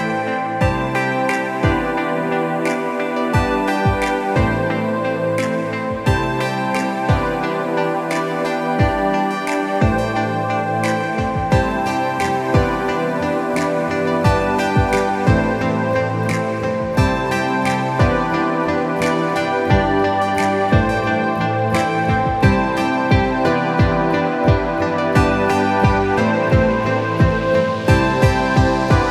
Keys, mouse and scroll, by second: 3.9 click, 6.4 shift+Tab, 11.6 shift+Tab, 12.2 ctrl+shift+Tab, 12.8 a, 14.2 ctrl+c, 15.0 ctrl+Tab, 15.7 ctrl+v, 17.9 ctrl+t, 19.6-22.5 alt+shift+drag, 22.5 Return, 25.2 ctrl+t, 27.5 ctrl+j, 28.5-29.1 drag.